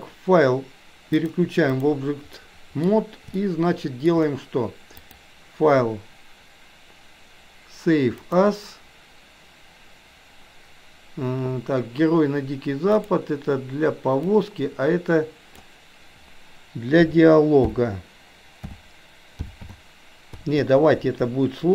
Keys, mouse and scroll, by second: 1.1-1.9 drag, 2.4-2.8 middle drag, 3.3-4.1 shift+middle drag, 5.0-8.9 drag.